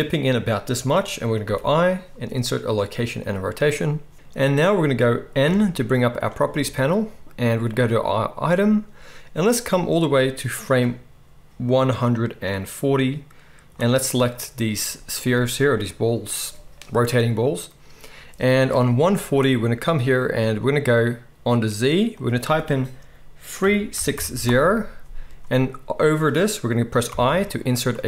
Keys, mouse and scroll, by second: 3.7 i, 6.1-6.4 drag, 6.5 n, 7.7 click, 10.0-14.2 drag, 22.2-28.0 drag, 27.1 i.